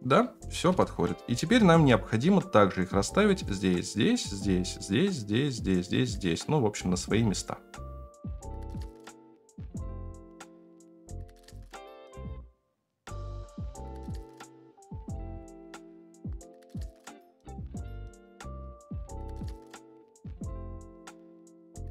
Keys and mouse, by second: 1.3-1.8 shift+middle drag, 8.3 F9, 8.8 ctrl+j, 9.0 click, 9.8 KP_7, 10.1 shift+click, 10.6 KP_0, 10.8 shift+middle click, 11.2 shift+middle click, 12.1-21.9 typing, 13.8 shift+middle click, 15.2 alt+z, 15.3 shift+middle click, 15.8 Tab, 16.6 shift+middle click, 17.5 alt+shift+z, 17.5 middle click, 17.6 Tab, 17.9 shift+middle click, 21.8 alt+z.